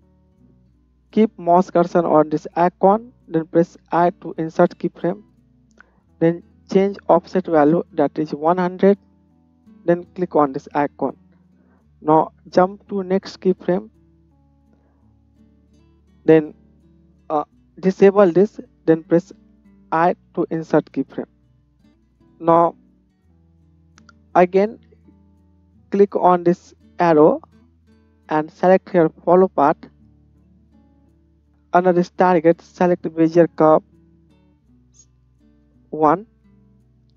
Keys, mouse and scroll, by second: 4.0 i, 10.6-13.8 middle drag, 13.8-18.1 drag, 18.1-22.1 middle drag, 22.1-37.1 drag.